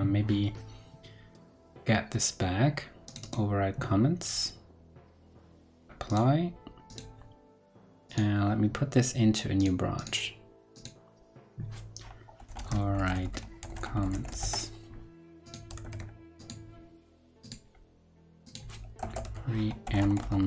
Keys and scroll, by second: 15.8 super+a.